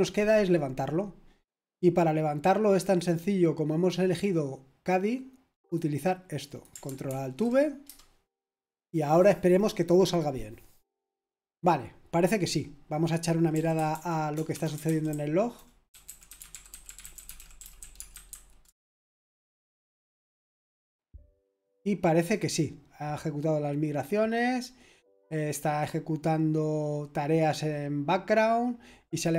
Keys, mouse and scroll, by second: 4.0-5.8 drag, 6.4 ctrl+click, 7.1 ctrl+alt+v, 7.8 Return, 13.2-18.8 typing.